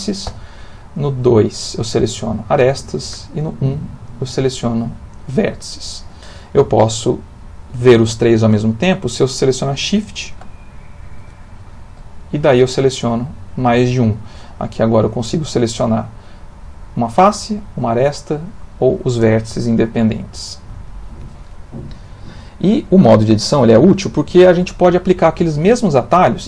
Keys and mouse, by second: 0.2 2, 0.9 click, 1.7 click, 2.1 click, 2.5 click, 3.1 1, 4.0 click, 4.6 click, 5.1 click, 11.2 shift+2, 11.6 shift+3, 14.4 click, 17.3 click, 18.3 click, 20.8 click, 22.2 ctrl+middle click.